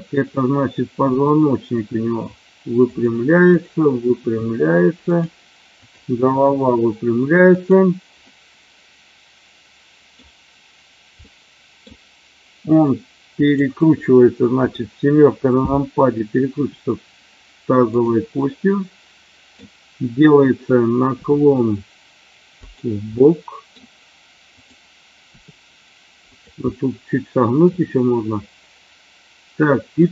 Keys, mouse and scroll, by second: 1.1 r, 2.8 click, 4.2 r, 5.1 click, 5.8 click, 6.3 r, 7.4 click, 8.2-10.2 middle drag, 11.3-11.8 middle drag, 13.3 click, 16.6 r, 18.3-19.4 middle drag, 21.2 r, 22.6 click, 23.2-23.7 middle drag, 25.2 r, 26.2 click, 26.7-27.6 middle drag.